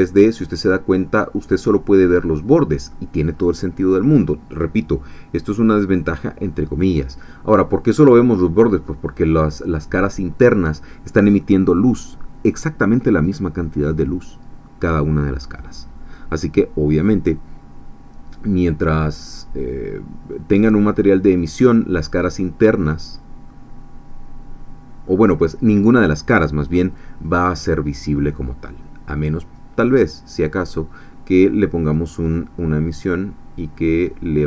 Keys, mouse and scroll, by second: 3.3-3.7 scroll up 1, 5.4 scroll down 1, 7.7-9.0 middle drag, 20.3-21.7 middle drag, 22.6-27.8 middle drag, 29.2 click, 31.9 click, 33.1-33.9 scroll down 1.